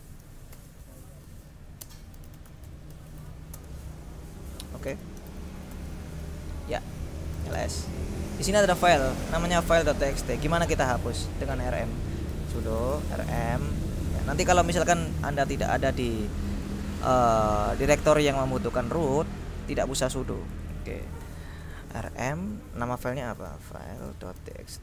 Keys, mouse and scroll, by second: 0.7-3.8 typing, 5.0 Escape, 5.1-6.1 typing, 7.2-8.0 typing, 9.4-11.8 drag, 12.1-13.8 typing, 16.5 click, 20.3-21.7 drag, 23.1-24.8 typing.